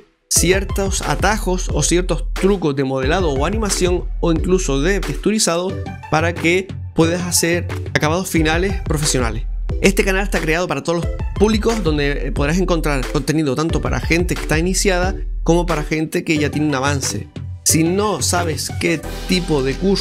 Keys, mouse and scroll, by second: 0.1 j, 0.8 middle click, 1.6 right click.